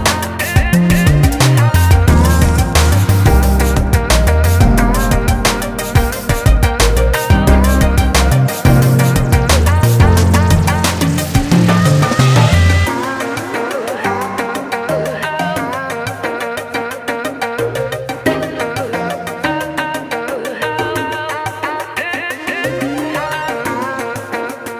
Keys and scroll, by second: 3.5 ctrl+z, 13.9 ctrl+z.